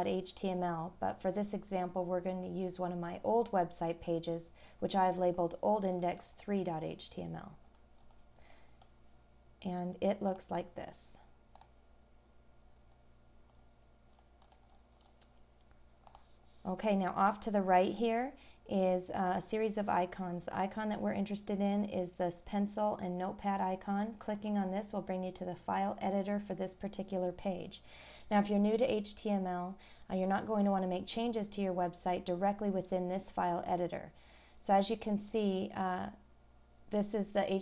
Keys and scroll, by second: 2.1 scroll down 1, 4.8 scroll down 1, 12.8 scroll down 1, 13.6 scroll up 1, 14.1-14.5 scroll down 1, 14.7-15.0 scroll up 1, 37.4-37.6 scroll down 1.